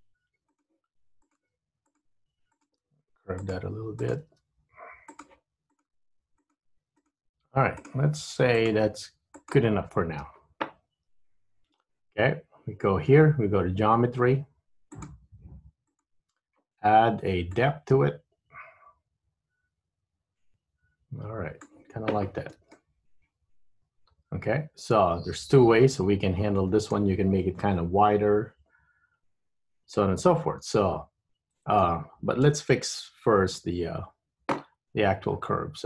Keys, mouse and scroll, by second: 1.4 click, 1.5 g, 2.7 click, 3.0 g, 4.1 click, 4.4 g, 5.8 click, 6.1 g, 7.1 click, 7.3 g, 8.6 click, 9.1 g, 11.6 Tab, 15.1 click, 15.9 click, 17.6 click, 22.8 middle click, 30.1 middle click, 32.7 KP_1, 33.8 KP_3, 34.3 Tab, 34.9-35.8 scroll up 2.